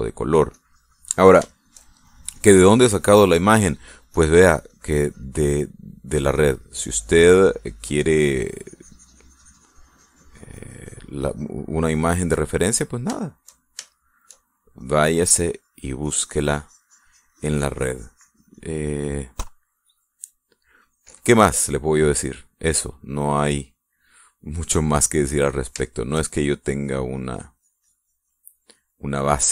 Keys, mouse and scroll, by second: 0.4 middle click, 1.1 click, 2.1 shift+middle click, 3.1 middle click, 4.7-6.0 drag, 6.1 middle click, 6.9-8.3 drag, 8.3 middle click, 8.9-12.2 drag, 12.5 middle click, 13.4-15.3 shift+middle drag, 15.4-19.4 shift+drag, 22.1 middle click, 22.9-26.9 middle drag, 27.3-29.5 drag.